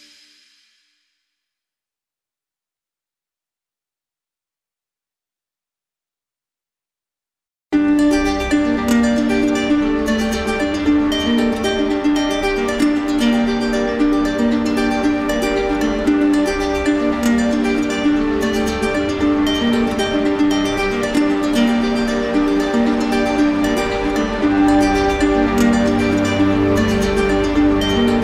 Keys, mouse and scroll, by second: 0.4 shift+click, 1.0 ctrl+z, 1.8 click, 3.1 click, 4.9 shift+click, 5.3 click, 5.7 click, 6.1 shift+click, 7.5 right click, 8.6 right click, 9.4 right click, 10.8 alt+click, 12.2 shift+click, 13.0 click, 14.1 shift+click, 15.2 shift+click, 15.6 shift+click, 15.9 shift+click, 17.2 shift+click, 18.3 d, 19.6 right click, 23.6 shift+click, 26.1 shift+click, 27.3 right click, 28.1 right click.